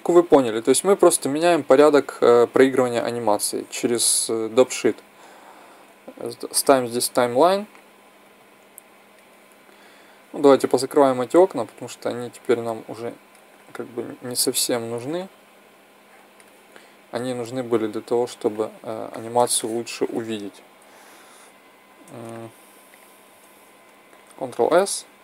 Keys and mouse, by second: 6.1 click, 8.0 click, 8.4 click, 11.0-14.4 drag, 15.7-16.5 drag, 18.9-20.6 middle drag, 22.7-23.9 drag, 24.2 ctrl+s, 24.5 drag.